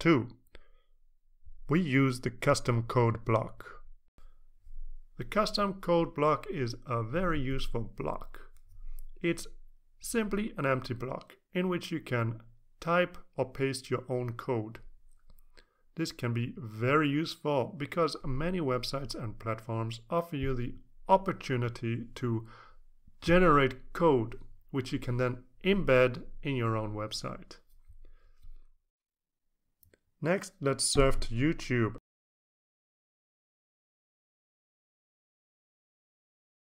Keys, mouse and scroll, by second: 1.5 t, 6.0-6.8 typing, 8.3-10.4 drag, 11.5 click, 13.7-31.7 drag, 32.4 click, 35.2 click.